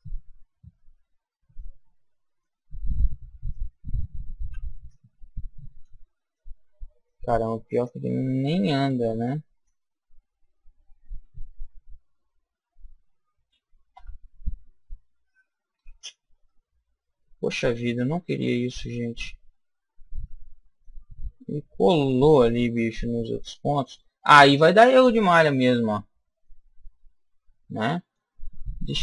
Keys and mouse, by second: 1.5 middle click, 2.7 shift+middle click, 3.5-5.4 right drag, 4.9 click, 6.3-7.9 middle drag, 7.8-9.6 drag, 11.2 s, 16.4-18.4 middle drag, 21.1-24.7 middle drag, 26.3-28.4 middle drag.